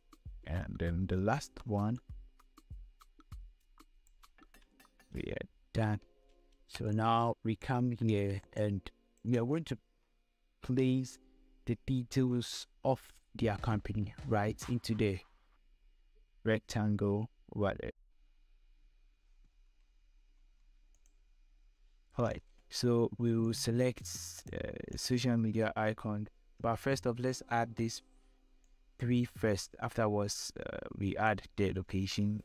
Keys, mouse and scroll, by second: 1.6 ctrl+j, 2.4-5.1 shift+drag, 5.1 scroll down 1, 6.5-9.2 typing, 6.6 scroll up 1, 7.4 click, 8.4 scroll up 1, 9.0 click, 17.9 click, 20.3 F10, 23.0 click, 24.3 ctrl+click, 25.0 ctrl+click, 28.1-32.4 drag.